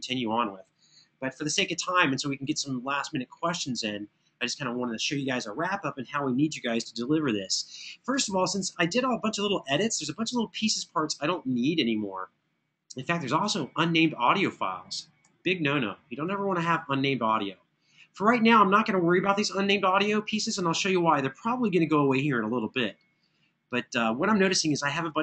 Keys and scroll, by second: 15.0 Down.